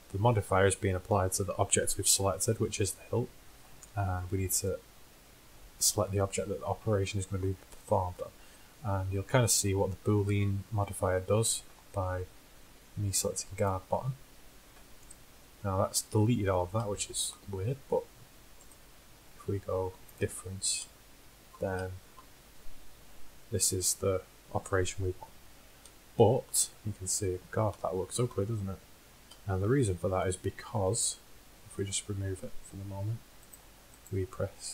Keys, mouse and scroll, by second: 4.6-6.7 drag, 18.8-20.7 drag, 25.3 middle drag, 25.6 z, 29.3 z, 31.8-33.6 drag, 33.6-34.0 middle drag.